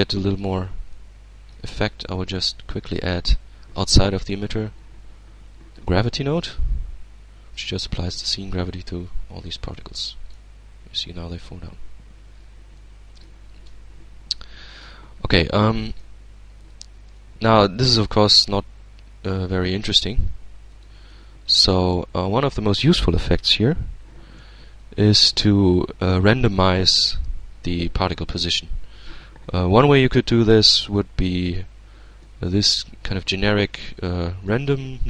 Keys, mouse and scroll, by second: 0.5-1.5 middle drag, 1.5 shift+a, 5.3 click, 6.2-7.6 drag, 8.3 alt+a, 8.8-9.3 scroll down 2, 9.3 alt+click, 10.8 scroll up 2, 11.3 scroll up 2, 11.9-12.4 scroll down 2, 12.4-13.2 middle drag, 13.2 alt+a, 14.0-14.8 alt+drag, 14.6 Tab, 15.0-16.0 middle drag, 16.3 click, 17.3-19.9 shift+drag, 20.3-21.9 shift+drag, 24.4 shift+a, 30.9 click, 31.8-32.7 middle drag, 32.8 click, 33.7-34.5 middle drag, 34.7-35.0 drag.